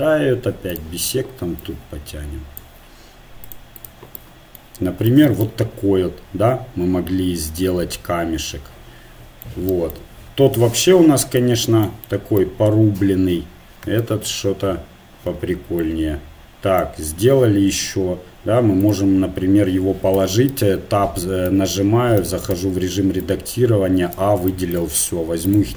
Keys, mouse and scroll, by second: 0.7-2.6 drag, 3.5-5.7 drag, 5.7 middle click, 11.1 Tab, 14.3 KP_1, 15.8-16.8 drag, 17.5 r, 20.2 Tab, 20.5 Tab, 21.5 Tab, 22.2 a, 22.5 a, 23.2-24.9 drag, 24.9 Tab, 25.4-25.7 right drag.